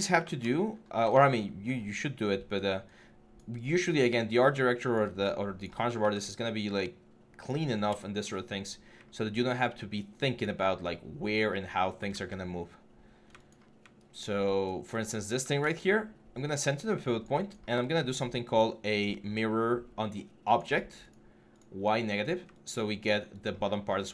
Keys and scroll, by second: 5.8 w, 7.5 6, 11.9 ctrl+z, 15.1 w, 23.4 3.